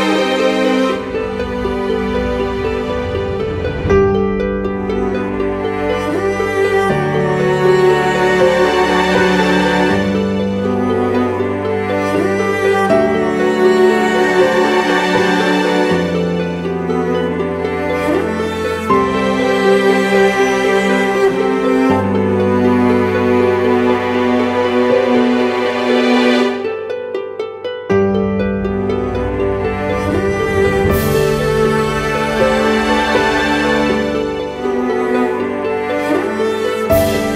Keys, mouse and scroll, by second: 23.1-25.7 scroll up 1.